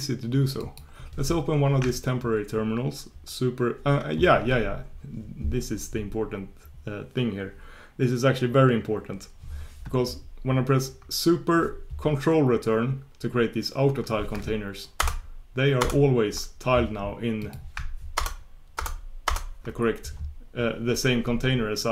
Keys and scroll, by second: 15.0 ctrl+super+Return.